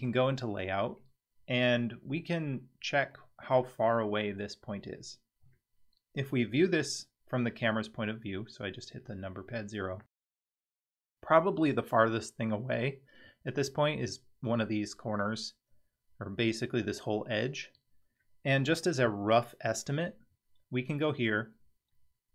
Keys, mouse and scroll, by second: 1.0-2.2 middle drag, 2.4-3.0 scroll down 2, 3.1 middle click, 6.3 KP_0, 19.0 KP_7, 20.6-22.0 scroll down 1.